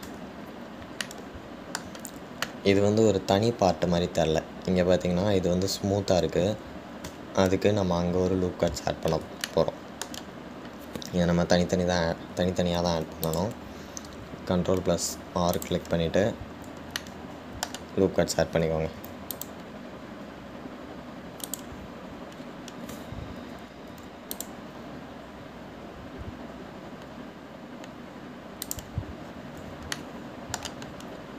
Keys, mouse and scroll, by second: 1.3 Tab, 2.2-5.2 shift+middle drag, 9.5-10.2 scroll up 3, 10.2-10.7 scroll down 1, 10.7-12.2 shift+middle drag, 12.2-12.9 scroll up 1, 12.9-13.5 scroll down 1, 14.1 ctrl+r, 18.2-20.2 shift+middle drag, 20.2 ctrl+r, 23.6-24.1 scroll up 2, 25.1 ctrl+r, 30.5-31.2 scroll down 1, 31.2-31.3 shift+middle drag.